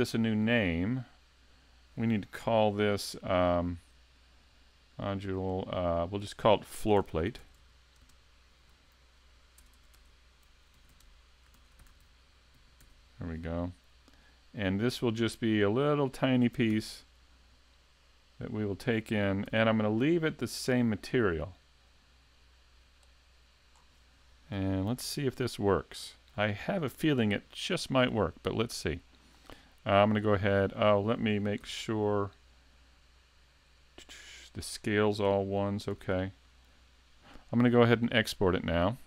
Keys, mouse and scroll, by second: 2.4 n, 3.5 click, 7.6 r, 9.8 BackSpace, 19.5 n, 21.1 click, 23.8-24.3 scroll down 3, 24.9 s, 25.8 shift+middle click, 30.2 click, 31.7 n, 33.2 click, 36.0 n, 38.1 click.